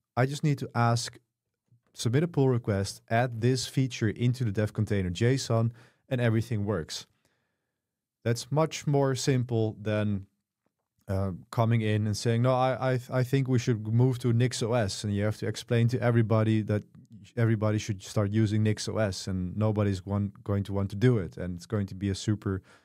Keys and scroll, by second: 1.1 k, 1.5 j, 2.4 k, 2.9 v.